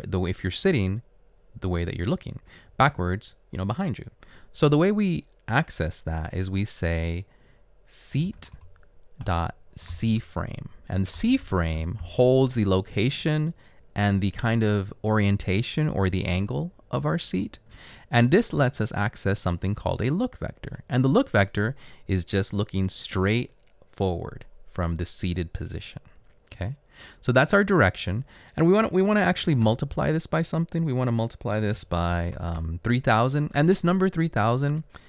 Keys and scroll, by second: 8.2-9.9 typing, 10.9-12.0 typing, 18.7 ., 20.8 typing, 29.7 shift+8, 31.6-33.1 typing.